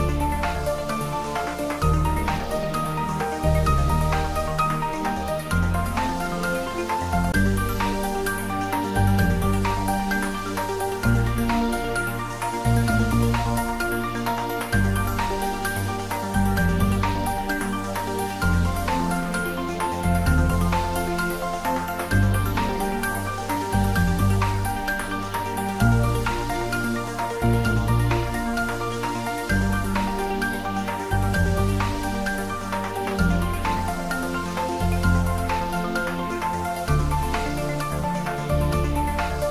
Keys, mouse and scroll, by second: 0.1 s, 14.0 click, 17.7-18.9 scroll up 1, 22.0 s, 26.5 click, 31.6-32.2 scroll up 1, 35.9-39.5 drag.